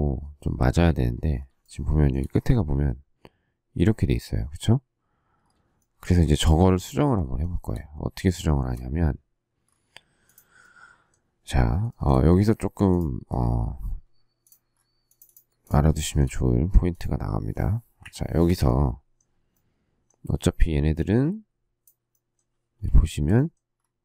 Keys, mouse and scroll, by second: 1.6 shift+middle click, 5.8 shift+middle click, 7.4 shift+middle click, 7.6 shift+middle click, 8.4 shift+middle click, 11.9 shift+middle click, 16.0 shift+middle click, 18.0 Delete, 22.8 shift+s.